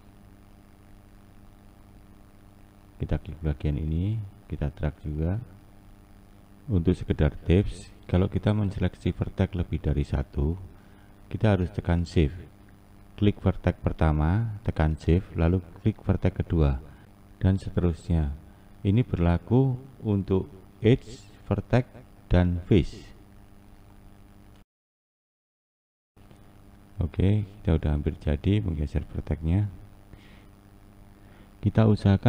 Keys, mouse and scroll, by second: 2.7 Left, 11.1 click, 11.9 shift+click, 16.4 click, 17.2 shift+click, 22.6 click, 23.3 shift+click, 26.9 click, 27.6 shift+click, 31.5 click.